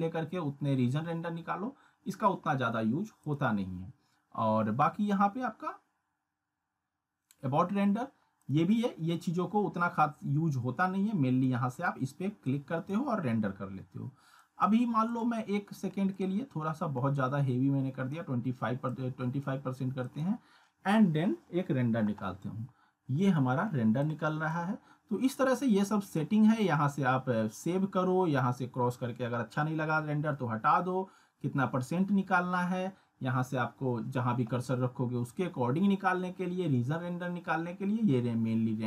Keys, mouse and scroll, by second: 3.2 click, 8.4 click, 11.4-12.0 drag, 24.0-24.6 drag.